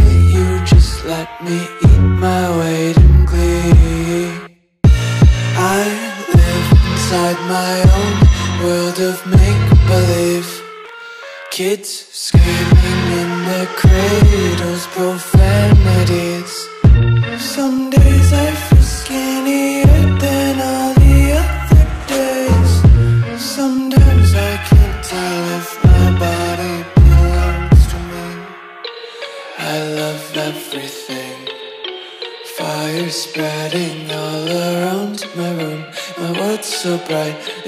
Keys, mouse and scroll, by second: 1.3 click, 4.6 click, 6.2 Delete, 7.1 click, 12.5 s, 23.2 click, 25.2 Delete, 25.8 click, 27.6 Delete, 28.1 click, 33.6 Delete, 34.6 click, 36.2 Delete, 36.8 click.